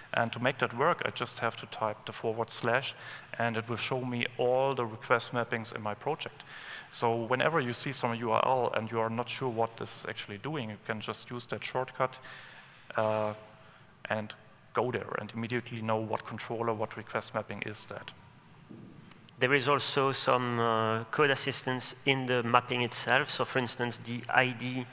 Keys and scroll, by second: 24.0 Escape.